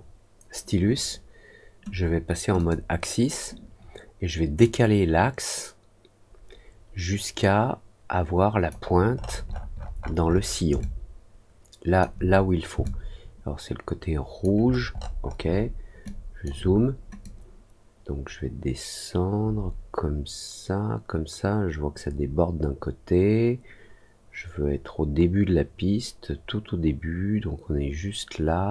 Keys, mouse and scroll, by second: 2.5 click, 4.6-8.6 drag, 9.1 middle click, 9.4 middle click, 10.7-11.9 alt+drag, 12.8-14.4 alt+drag, 14.6 alt+middle click, 14.9 alt+middle click, 15.1 alt+middle click, 15.4 alt+middle click, 16.0 alt+click, 17.2-28.7 drag.